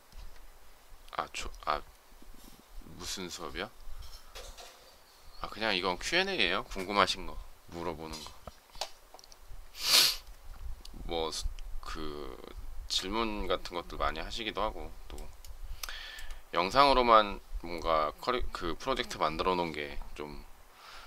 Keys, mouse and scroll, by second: 15.2 shift+middle click.